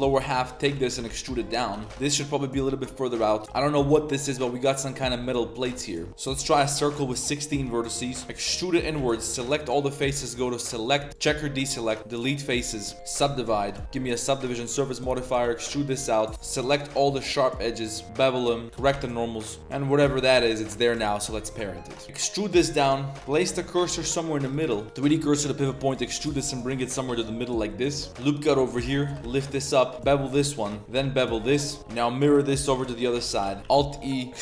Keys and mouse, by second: 0.0-1.7 typing, 0.0 click, 0.3 shift+click, 3.4 click, 5.0 middle click, 5.4 middle click, 5.8 middle click, 6.1 KP_1, 6.1 z, 6.1 shift+a, 7.3 click, 8.2 s, 8.2 e, 8.3 s, 8.9 3, 9.2 alt+click, 10.2-10.8 drag, 11.1 click, 11.7 middle click, 12.0 x, 12.6 click, 12.9 w, 13.6 Tab, 13.8 ctrl+1, 14.4 Tab, 14.7-17.1 typing, 14.8 click, 18.0 ctrl+b, 18.6-19.7 typing, 18.9 Tab, 19.6 Tab, 19.9 click, 20.1 shift+click, 20.9 ctrl+p, 21.9 click, 22.0 Tab, 22.0 g, 22.8 Tab, 23.1 Tab, 23.1 shift+s, 23.3 Tab, 23.9 Tab, 24.1 click, 24.4 shift+click, 24.6-26.1 typing, 24.7 click, 24.8 click, 25.4 click, 27.3 click, 27.6 click, 28.1 ctrl+r, 28.6 a, 28.7 a, 28.8 b, 29.0 g, 29.9 ctrl+b, 30.8-31.8 typing, 30.9 ctrl+b, 33.3 a, 33.4 shift+w, 33.6 alt+e, 33.8 alt+e.